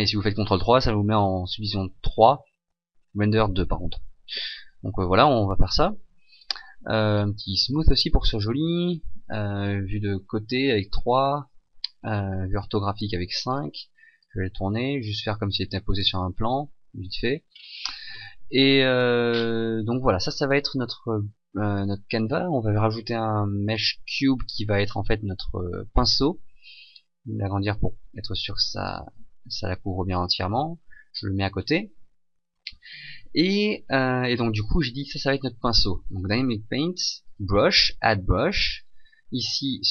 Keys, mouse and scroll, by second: 6.2 click, 6.4 click, 7.6 click, 8.6 KP_3, 8.8 KP_5, 10.2-10.8 scroll up 2, 11.6 r, 14.2 click, 16.6 middle click, 17.5 scroll down 2, 18.4 KP_Decimal, 19.3-19.8 scroll down 2, 19.8 middle click, 21.2 shift+middle click, 22.7 shift+a, 24.8 click, 27.0 s, 28.5 click, 30.4 click, 32.4 middle click.